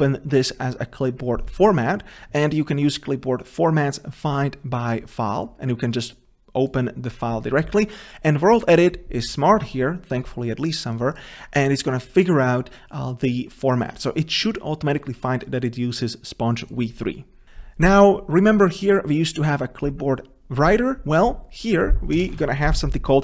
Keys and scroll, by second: 22.5 ctrl+v.